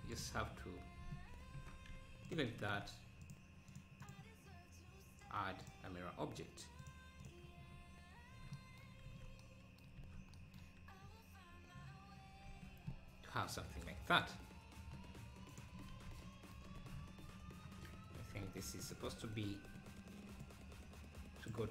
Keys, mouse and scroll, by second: 1.6 ctrl+KP_Add, 1.9 x, 2.6 Tab, 3.2-7.8 drag, 9.1 ctrl+s, 10.0 ctrl+s, 11.1 `, 12.5 ctrl+s, 15.5 click, 15.9 ctrl+s, 16.8 ctrl+s, 17.2-17.8 scroll down 3, 18.5 Tab, 18.9 click, 20.5-21.7 drag.